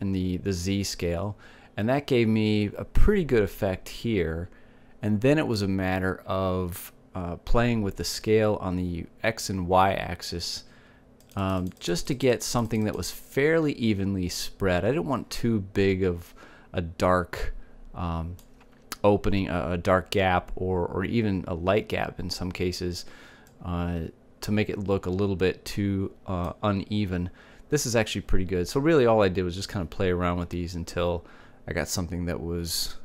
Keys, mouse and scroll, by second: 12.6-16.1 drag, 17.8-19.4 drag, 19.4 click, 24.9-26.6 drag.